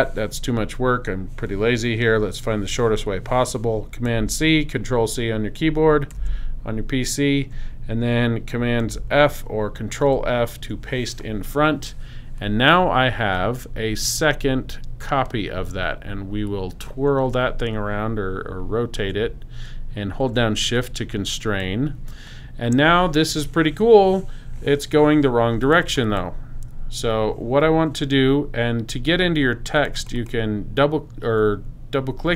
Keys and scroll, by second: 6.1 super+c, 10.0 super+f.